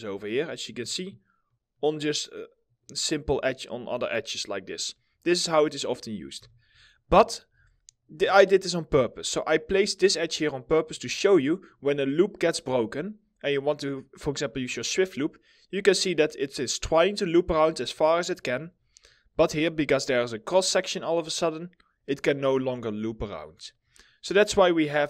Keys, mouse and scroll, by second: 1.5 middle click, 2.9 right click, 5.0 middle click, 6.5 w, 6.6 scroll, 6.6 scroll down 1, 6.6 w, 7.0 alt+middle click, 7.9 alt+middle click, 8.8 middle click, 11.0 scroll down 1, 11.5 alt+middle click, 18.3 right click, 18.8 scroll up 1, 19.1 alt+middle click, 19.6 scroll up 1, 23.6 middle click, 23.7 scroll down 1.